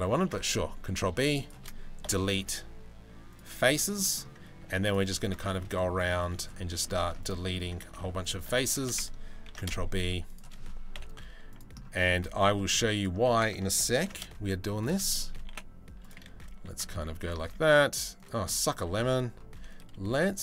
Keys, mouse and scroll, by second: 1.6 Delete, 3.2 shift+middle click, 3.4 middle click, 4.0 Delete, 4.1 ctrl+r, 5.0 shift+middle click, 5.5 ctrl+r, 6.8 ctrl+r, 7.5 ctrl+r, 9.0 ctrl+b, 11.2 Delete, 11.6 middle click, 12.5 alt+click, 13.6 ctrl+b, 15.1 Delete, 16.1 1, 16.3 click, 17.0 ctrl+r, 18.1 click, 19.7 z, 20.3 3.